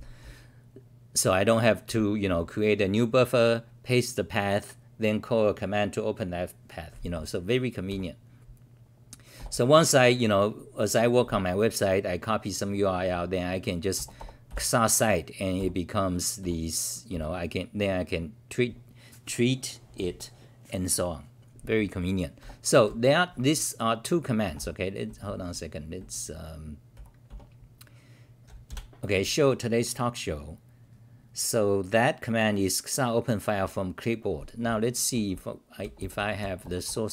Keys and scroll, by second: 2.3 w, 7.9 g, 15.6 g, 16.4 r, 17.1 c, 22.4 f, 25.1-27.3 typing, 28.6 ctrl+r.